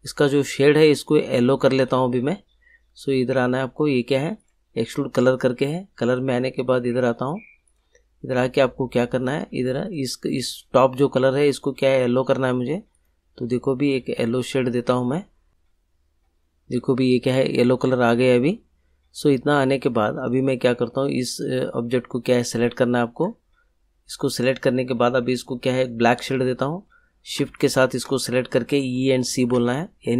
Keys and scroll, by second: 28.9 e, 29.5 c.